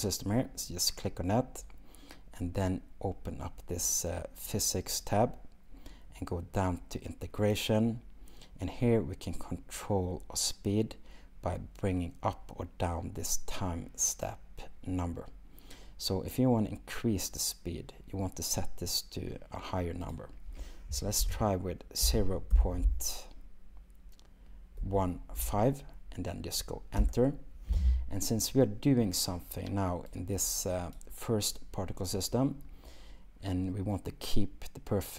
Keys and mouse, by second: 5.0 click, 7.5 click, 20.2-27.1 drag.